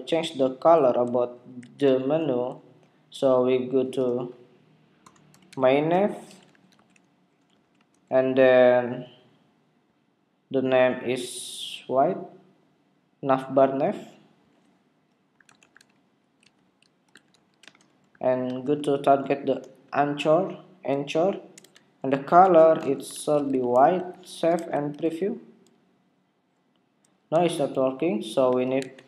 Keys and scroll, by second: 1.5 super+Tab, 24.5 super+Tab, 25.0 super+r, 27.2 super+Tab.